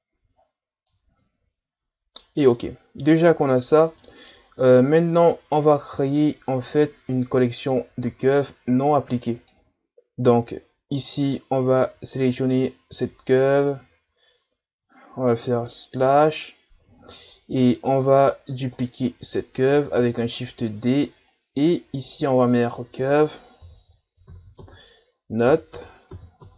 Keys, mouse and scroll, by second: 0.1 a, 0.4-0.9 scroll down 4, 0.9-2.6 middle drag, 2.6-3.9 scroll down 4, 4.0-7.0 middle drag, 7.7-10.5 drag, 10.5-10.9 scroll up 2, 10.9-11.5 middle drag, 11.5-12.0 scroll up 4, 12.4 right click, 14.4-15.9 scroll down 2, 15.9 KP_Divide, 17.2 shift+scroll down 2, 17.5 middle click, 18.4-19.9 scroll down 8, 20.0 shift+d, 22.0-25.1 drag.